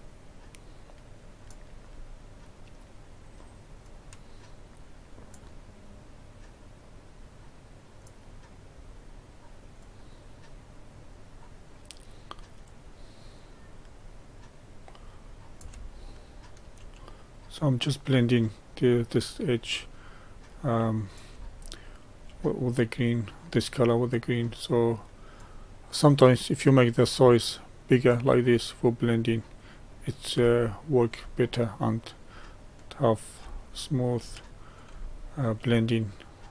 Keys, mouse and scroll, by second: 16.0-17.0 shift+middle drag, 17.0-20.1 drag, 21.6-22.6 shift+middle drag, 22.6-30.5 drag, 30.5 shift+middle click, 31.3 scroll down 1, 31.9-33.5 drag, 33.5 shift+middle click, 34.3 click, 35.0 shift+middle click, 35.7-36.5 drag.